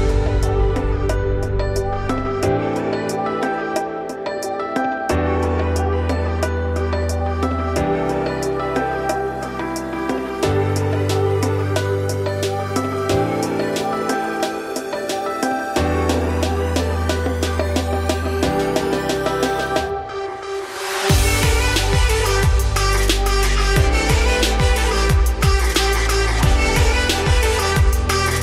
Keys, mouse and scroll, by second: 0.2-1.1 middle drag, 1.1 ctrl+z, 1.5 ctrl+z, 1.8 Tab, 2.3 Tab, 2.5 a, 3.2 shift+n, 3.7 Tab, 3.9 scroll down 2, 4.0-4.3 middle drag, 4.3 Tab, 4.6 click, 4.7 3, 4.9 click, 5.2 middle click, 5.7 g, 7.3 Tab, 7.5-8.1 middle drag, 8.1 click, 8.4 scroll down 3, 8.5-11.1 middle drag, 11.1 click, 12.6 alt+x, 14.4 scroll up 1, 14.6 shift+middle click, 14.9-16.1 scroll up 3, 16.1 click, 16.4-17.6 scroll down 5, 17.6-18.6 drag, 18.8-19.2 scroll down 1, 19.2 click, 19.4-21.1 scroll down 5, 21.1-24.5 drag, 24.5-25.4 scroll up 4, 24.7 middle click, 25.4-26.8 shift+middle drag, 26.8-28.1 shift+drag, 28.1-28.4 scroll down 3.